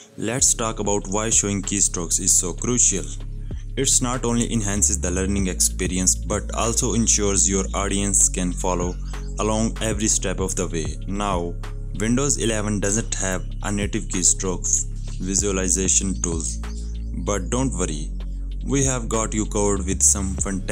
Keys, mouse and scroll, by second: 0.0 Down, 0.2 click, 3.0-4.2 alt+scroll down 2, 4.0-5.4 typing, 5.3 right click, 6.1 click, 8.5 click, 9.8 right click, 11.0 click, 12.9-17.1 typing, 17.7 Up, 18.0 Right, 18.7 Down, 18.9 click.